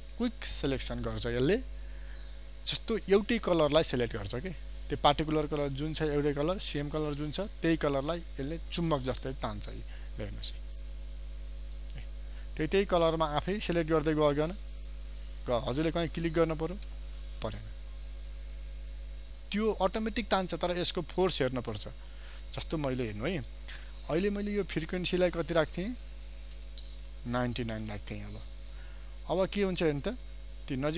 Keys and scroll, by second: 23.6 ctrl+d.